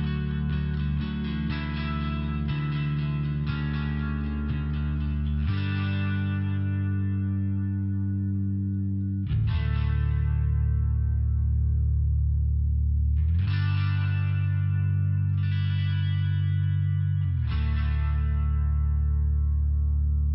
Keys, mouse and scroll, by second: 1.5 click, 3.2 ctrl+[, 4.4-5.8 typing, 7.1 click, 7.5 click, 7.7 click, 8.2 click, 8.7 click, 9.3 click, 10.0 click, 10.4 click, 10.9 click, 11.1 click, 11.5 click, 12.2 click, 13.0 click, 13.5 click, 14.0 click, 14.1 click, 14.6 click, 15.6 click, 16.1 click, 16.7 click, 17.2 click, 17.8 click, 18.2 click, 18.7 click, 19.4 click, 19.9 click.